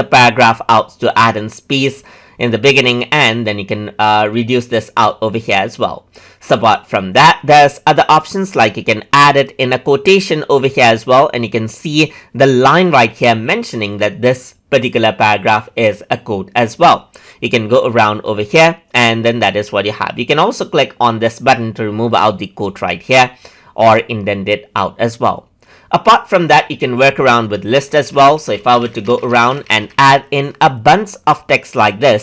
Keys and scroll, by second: 28.1 F4.